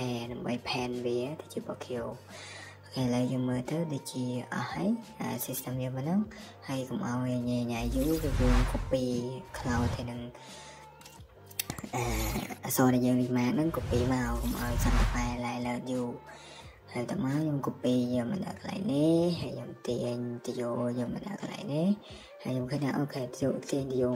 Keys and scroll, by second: 1.8 Escape, 2.0 Escape, 4.0 Escape, 11.6-12.2 typing, 13.4 typing, 17.6 Escape, 17.9 Escape, 18.0 Escape, 20.3 Escape, 20.5 Escape.